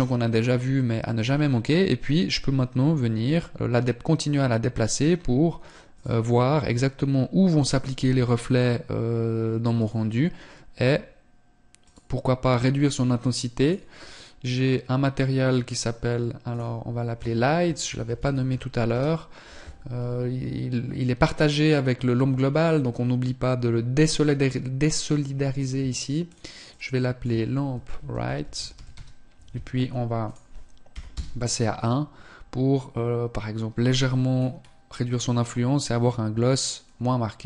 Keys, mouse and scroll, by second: 2.6 g, 5.5 click, 7.4 g, 10.2 g, 12.9 click, 23.5 click, 29.8 click, 33.9 scroll up 1, 34.8-35.4 scroll up 1, 36.2 click.